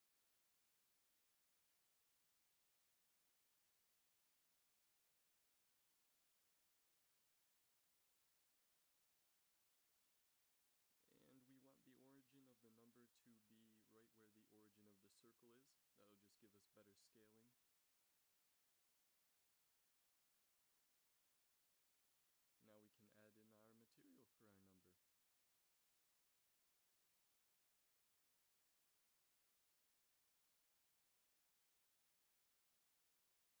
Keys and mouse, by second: 0.9-2.2 drag, 3.3 shift+s, 7.0 ctrl+alt+shift+c, 12.5 ctrl+alt+shift+c, 14.5 s, 16.5 a, 17.7 ctrl+s, 22.7-23.5 drag, 28.5-32.1 drag.